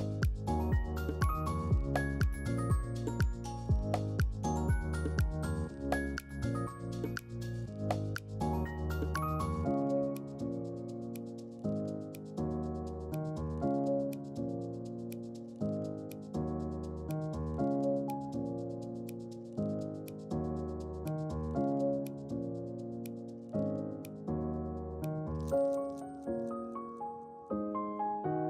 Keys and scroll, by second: 2.9-4.9 typing, 12.8 ctrl+q, 20.6-22.0 typing.